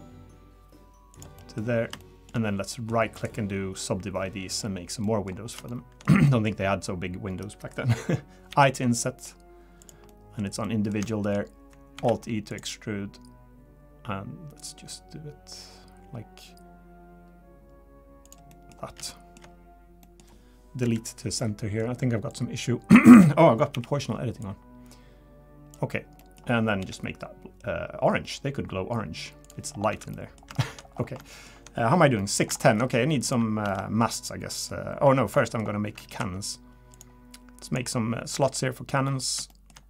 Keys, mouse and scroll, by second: 1.4 middle click, 1.6-1.9 scroll up 2, 2.0 shift+middle click, 2.7 middle click, 3.1 right click, 4.7 scroll down 2, 5.3 middle click, 5.3 scroll up 2, 5.7 shift+middle click, 6.3 middle click, 6.8-7.8 scroll down 1, 8.5 i, 10.1 middle click, 10.6 middle click, 11.1 shift+middle click, 11.2 shift+middle click, 11.9 alt+e, 18.5 middle click, 18.7 scroll up 3, 19.1 shift+middle click, 19.4 shift+scroll down 3, 19.5 scroll up 1, 19.5 scroll down 1, 20.0 middle click, 20.8 KP_Decimal, 21.3 scroll down 1, 21.4 middle click, 22.3 click, 23.1 ctrl+z, 23.7 o, 24.4 click, 25.9 scroll down 2, 26.2 middle click, 26.8 g, 29.7 scroll down 3, 29.9 Tab, 30.1 middle click, 30.6 shift+middle click, 30.9 scroll down 2, 31.2 shift+middle click, 32.2 middle click, 32.6 shift+middle click, 33.2 click, 33.6 Tab, 33.7 middle click, 34.1 click, 34.5 middle click, 35.4 middle click, 36.1 ctrl+r, 37.9-38.3 scroll down 1, 38.3 3, 39.5 shift+middle click.